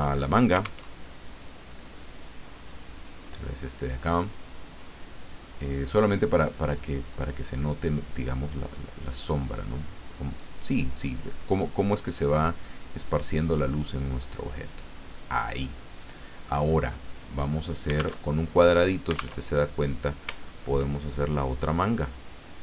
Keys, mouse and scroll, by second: 0.8 alt+Tab, 2.1 click, 7.0 click, 9.1-10.4 drag, 12.0-14.9 drag, 16.0 click, 17.5 click, 18.2 alt+Tab, 19.4 alt+Tab, 20.4-20.7 ctrl+scroll up 2.